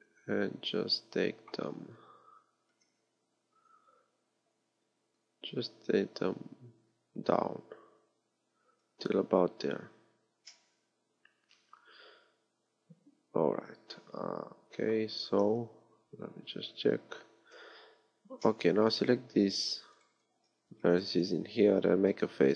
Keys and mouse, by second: 2.3 KP_1, 2.7 KP_3, 8.9-12.6 middle drag, 15.5 z, 16.5 z, 17.4 z, 18.5-19.5 drag, 20.4 z, 22.3 f.